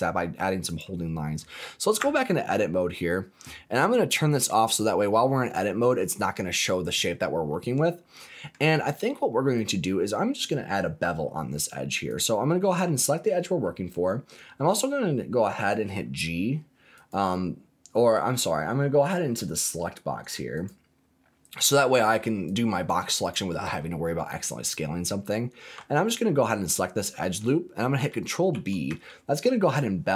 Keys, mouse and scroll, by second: 0.6 click, 2.0 Tab, 5.4 click, 7.5-8.5 middle drag, 9.5 click, 11.0 2, 12.0 click, 16.9 click, 20.5 click, 22.4 click, 23.1 click, 24.6 click, 25.9 alt+click, 28.5 ctrl+b.